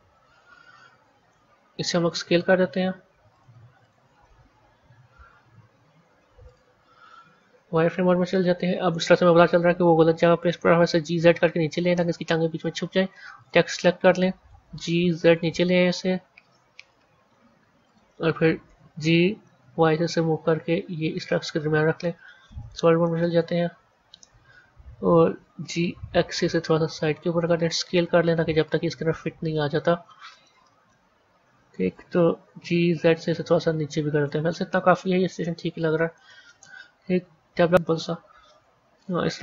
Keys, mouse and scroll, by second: 2.0 s, 3.7 click, 5.7 z, 7.3 KP_1, 8.4 KP_3, 9.9-10.3 scroll down 2, 10.3 g, 13.3 click, 14.5 g, 18.6 g, 21.8 z, 22.9-25.5 middle drag, 25.5 g, 27.7 s, 29.1-30.3 scroll up 3, 30.3-32.3 middle drag, 32.3 g, 34.7-37.5 middle drag, 37.5 Tab, 37.7-38.7 middle drag, 38.7 scroll down 1, 39.2-39.4 middle drag.